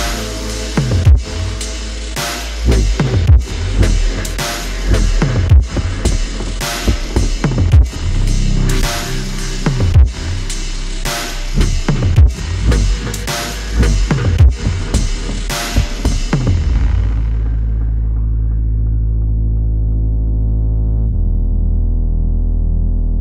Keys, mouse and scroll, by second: 0.4 ctrl+t, 10.2 alt+shift+click.